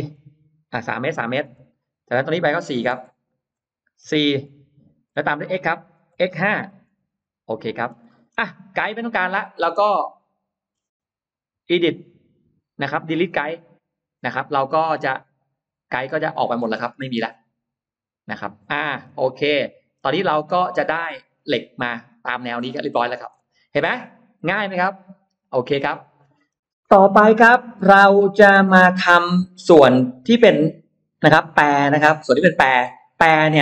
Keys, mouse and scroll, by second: 0.4 Return, 1.4 Return, 2.6 click, 4.8 Return, 4.9-5.2 scroll down 1, 6.0 x, 6.4 5, 6.8 Return, 7.5 space, 7.6-8.1 scroll down 1, 7.9 middle click, 8.4-8.8 scroll up 1, 9.1-9.5 scroll up 1, 9.2 middle click, 9.5 scroll down 1, 9.9 middle click, 11.6 click, 13.4 click, 14.2-16.4 middle drag, 16.7-17.2 scroll up 1, 17.0-18.8 middle drag, 17.9 scroll down 1, 19.1-19.8 scroll up 1, 19.6 middle click, 21.2 click, 22.2 click, 22.8 middle click, 23.8-24.3 scroll down 1, 24.3-25.5 middle drag, 24.3 scroll up 1, 25.7 space, 25.8 click, 26.2-26.6 scroll up 1, 26.6-28.2 middle drag, 28.5-29.1 scroll up 1.